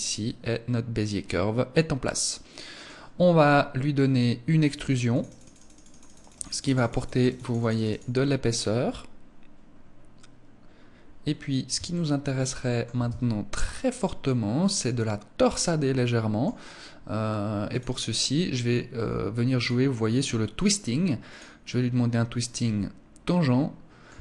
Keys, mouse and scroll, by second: 4.6 click, 5.1 click, 5.2 click, 5.5 click, 5.7 click, 5.9 click, 6.1 click, 6.6 click, 6.7 click, 7.1 click, 7.2 click, 7.9 scroll up 4, 9.1-9.5 scroll down 3, 11.4 shift+middle click, 12.5 Tab, 13.1 Tab, 13.7 middle click, 17.2 click, 19.1 click, 21.6 scroll up 1, 22.1 middle click, 23.6 Tab.